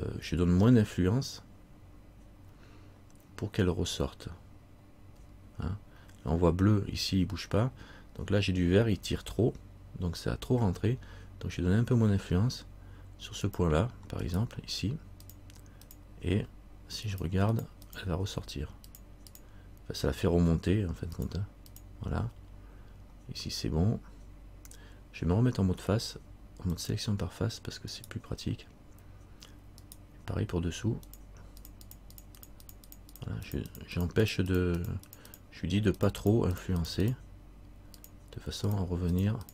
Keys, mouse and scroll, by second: 0.9 middle click, 4.4 z, 5.3 z, 13.6 click, 14.4 right click, 15.4 click, 16.5 z, 17.3 click, 18.5 click, 18.5 z, 19.1 click, 21.4 click, 22.1 click, 22.3 z, 26.9 click, 28.1 right click, 31.2 click, 33.4-39.5 click.